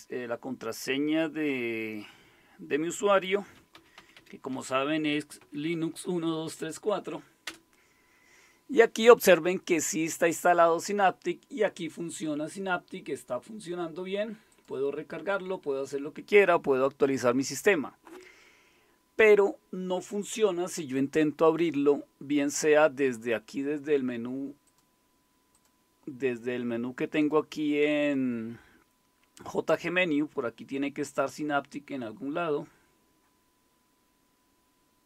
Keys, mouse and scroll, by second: 2.9-6.9 typing, 7.4 Return, 14.5 click, 24.6 click, 25.5 click, 27.1 click, 27.6 click.